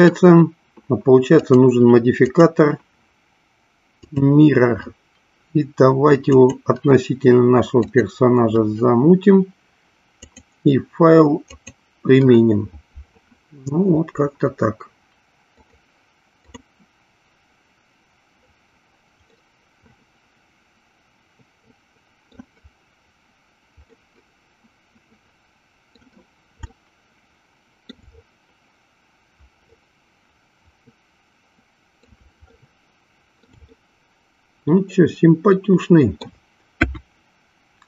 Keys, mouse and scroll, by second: 1.3 click, 2.2-4.2 drag, 6.2 click, 10.1-11.7 drag, 15.8 click, 16.7 click, 19.6-22.6 middle drag, 24.2-25.9 middle drag, 26.6-28.1 shift+middle drag, 29.8-31.9 middle drag, 32.6 shift+middle click, 33.7-36.3 middle drag, 36.8 KP_1.